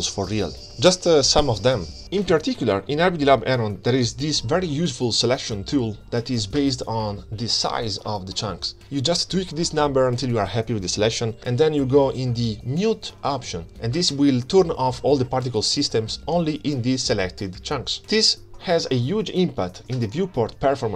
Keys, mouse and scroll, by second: 0.2 click, 0.4 space, 1.4 space, 1.6 scroll up 5, 1.6 space, 3.6 space, 3.9 shift+Left, 4.0 middle click, 4.0 scroll down 1, 4.1 scroll up 2, 4.2 scroll down 3, 6.6-11.5 shift+drag, 11.8-12.4 middle drag, 12.4 scroll down 5, 12.6 scroll up 3, 12.8 scroll down 1, 13.0 scroll down 3, 14.8-15.3 drag, 15.3 scroll down 2, 16.6 click, 18.3 click, 19.0 scroll up 6, 19.2 shift+click, 19.7 click, 20.8 ctrl+s, 20.9 space.